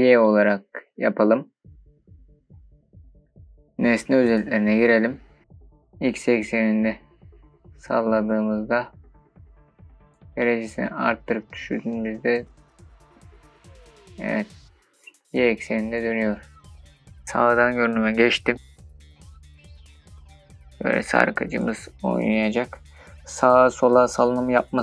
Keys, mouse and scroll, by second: 3.7-4.9 drag, 8.2-17.2 drag, 17.2 KP_5, 17.2 KP_3, 20.9-24.8 drag.